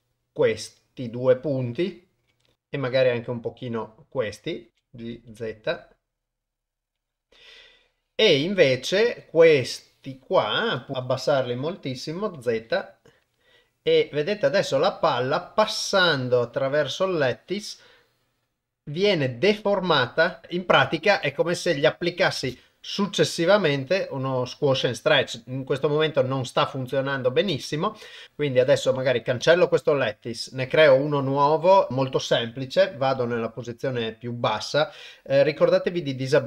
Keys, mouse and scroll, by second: 2.5 KP_0, 2.8 g, 10.0 click, 10.9 g, 14.2-22.1 drag, 22.4 shift+space, 27.5 shift+space, 28.2 Tab, 28.5 Delete, 29.4 shift+a.